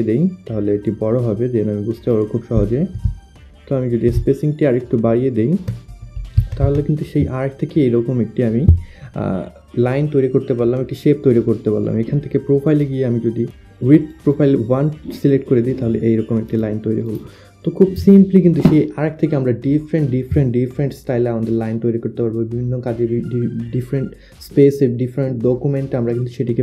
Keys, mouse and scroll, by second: 2.1 click, 2.6 Down, 4.2 Up, 4.4 Down, 5.4 Down, 6.5 Up, 12.7 click, 15.3 click, 19.1 click.